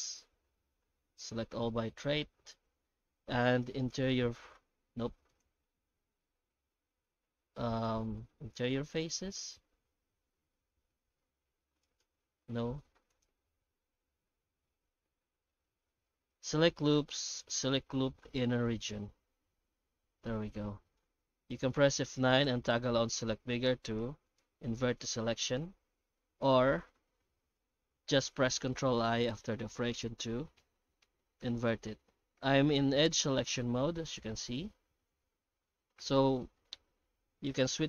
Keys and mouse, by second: 5.3-12.0 drag, 13.2-18.8 drag, 20.2 middle click, 22.0 F9, 25.0 click, 29.2 ctrl+i, 29.5 ctrl+i, 29.9 ctrl+i, 30.6 ctrl+i, 31.0 ctrl+i, 31.4 ctrl+i, 32.3 ctrl+i, 33.6 shift+middle click, 36.0 ctrl+i.